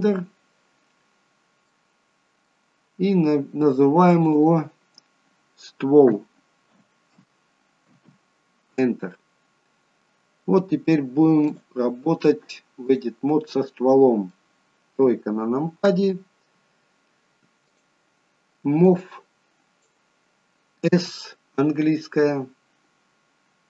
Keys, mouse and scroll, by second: 0.1 shift+a, 1.9 middle click, 4.3 click, 4.5 click, 11.7 click, 13.7-14.1 scroll down 3, 14.1 middle click, 15.1 KP_3, 17.9 click, 19.0 click, 21.1 s.